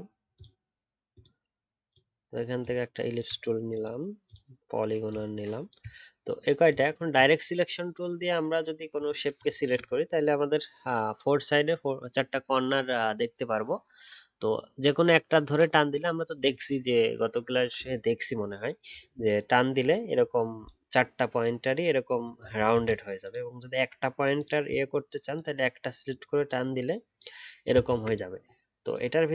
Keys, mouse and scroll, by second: 22.7 ctrl+z, 23.7-24.4 alt+scroll up 1, 27.9 ctrl+z.